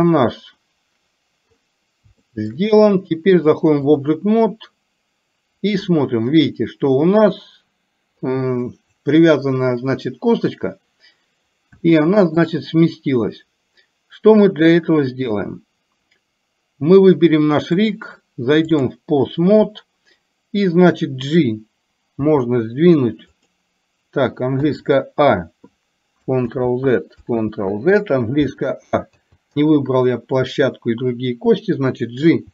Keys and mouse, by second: 2.4 shift+middle click, 3.5 click, 7.5 click, 11.9 shift+middle click, 18.0-19.0 drag, 22.3 g, 24.8 a, 26.6 ctrl+z, 27.5 ctrl+z, 29.3 a.